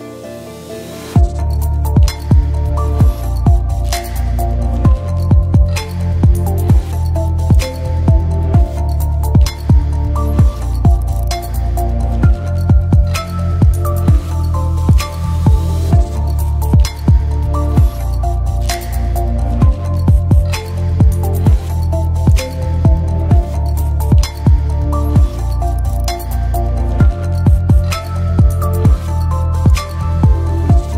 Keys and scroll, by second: 1.2 space, 8.6 BackSpace, 9.7 space, 10.7-11.8 typing, 19.2-20.3 typing, 22.6 BackSpace.